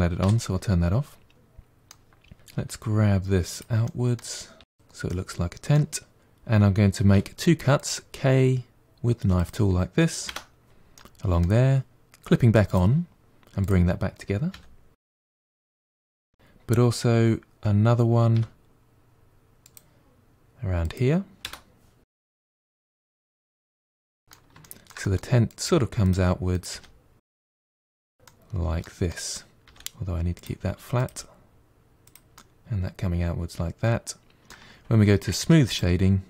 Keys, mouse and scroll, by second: 0.3 o, 1.3-2.6 middle drag, 2.6 g, 3.9 middle click, 4.6 g, 5.7 middle click, 6.9 k, 10.8-12.5 middle drag, 12.5 click, 13.5 click, 14.3 g, 18.1 k, 22.0 click, 22.2 g, 22.7 middle click, 23.4 g, 23.7-25.3 middle drag, 25.3 click, 25.5 g, 26.4 click, 26.6 g, 27.6 middle click, 28.0 scroll down 3, 28.1-29.5 middle drag, 29.5 g, 30.8 click, 30.9 g, 32.2-35.2 middle drag, 35.2 Tab, 35.5-36.2 right drag.